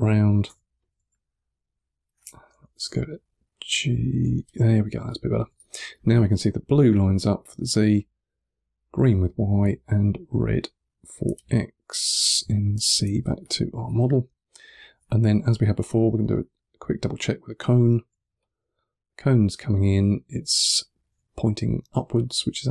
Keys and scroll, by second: 0.3 e, 0.8 3, 2.4-3.2 typing, 4.8 2, 5.5 1, 12.0-13.9 typing, 18.1 2.